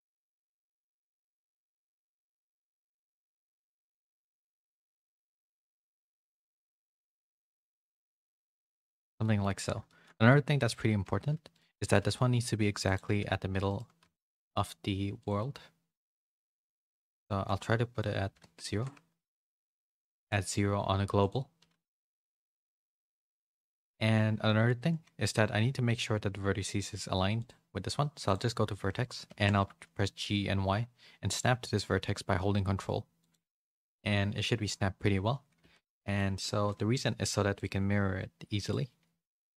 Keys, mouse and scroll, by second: 0.7 middle click, 1.3 middle click, 1.9 g, 2.1 click, 2.5 g, 8.8 click, 9.3 shift+middle click, 9.8 shift+middle click, 11.9 g, 13.1 b, 14.0 n, 15.2 click, 17.0-19.3 drag, 19.2 ctrl+z, 19.2 g, 19.6 g, 21.1-23.0 drag, 23.8 click, 27.4-28.5 drag, 35.6 Tab, 36.2 z, 36.6 middle click, 39.2-39.5 drag.